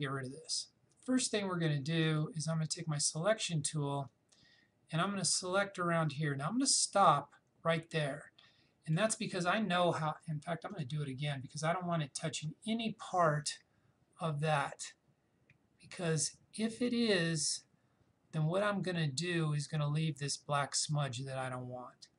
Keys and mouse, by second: 2.0-10.7 drag, 14.5-22.1 drag.